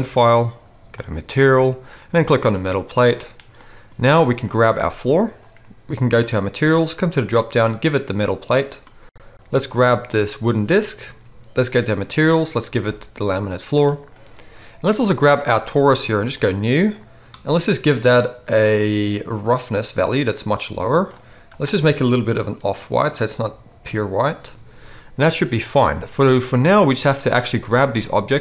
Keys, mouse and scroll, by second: 2.1-4.5 middle drag, 4.5-6.2 right drag, 6.2 middle click, 6.3 right click, 7.0-9.8 middle drag, 9.8-11.9 right drag, 11.9-16.4 middle drag, 16.4-21.6 drag, 21.6-28.4 right drag, 26.7 click, 26.7 middle click.